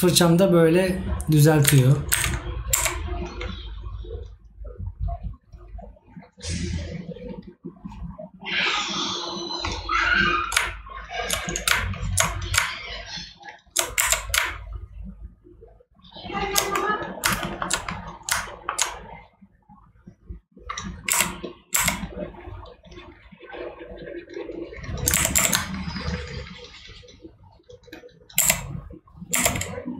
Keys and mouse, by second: 17.5 right click.